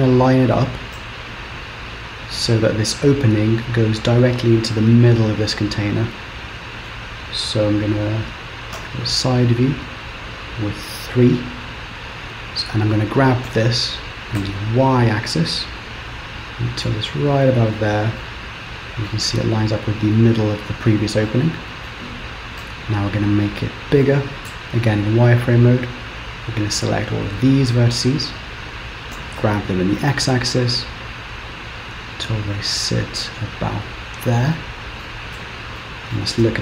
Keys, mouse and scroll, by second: 1.1 z, 4.8 middle click, 8.0-11.0 scroll up 1, 11.8-12.2 scroll down 2, 13.7 g, 18.2 middle click, 19.4-21.3 scroll down 5, 21.4 middle click, 22.7 KP_7, 23.4 scroll up 2, 24.6 click, 26.5 click, 29.2 g, 34.6 middle click, 35.4 Tab, 35.9 middle click, 36.5 z.